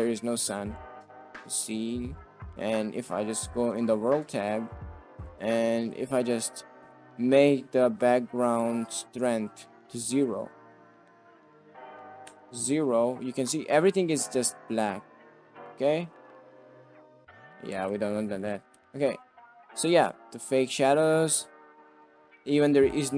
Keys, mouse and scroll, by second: 0.6 middle drag, 1.1 shift+middle drag, 1.2 shift+click, 1.3 drag, 3.7 click, 5.5 click, 8.6 click, 9.4 middle click, 10.6 click, 10.9 click, 11.5-12.6 drag, 13.3 middle click, 13.8 click, 16.9 drag, 17.9 ctrl+z, 18.5 ctrl+z, 18.8 ctrl+z, 19.1 drag, 19.5 shift+drag, 20.7 click.